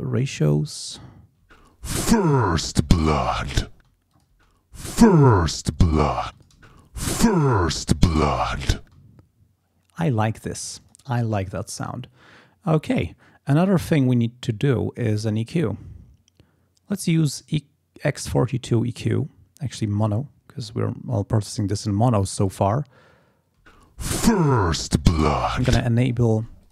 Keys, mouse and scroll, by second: 1.4 space, 3.7 space, 4.1 click, 6.2 space, 6.4 click, 8.8 space, 10.8 click, 12.8 click, 13.5 right click, 20.0 click, 21.1 click, 22.2 click, 23.6 space, 25.4 space, 26.3 space, 26.6 click.